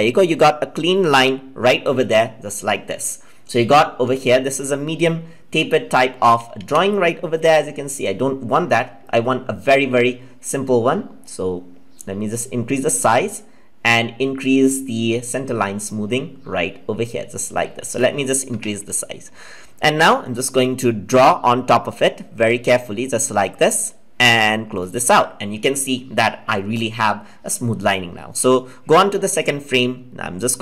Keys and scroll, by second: 6.5 ctrl+z.